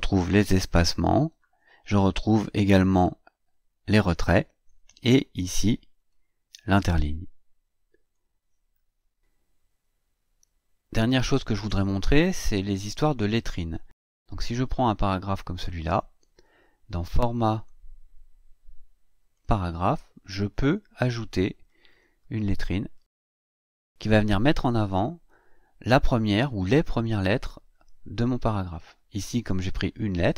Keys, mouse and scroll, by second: 6.0 click, 8.0 click, 13.5-15.5 drag, 17.3 click, 19.1 click, 21.7 click, 22.7 click, 23.4 click.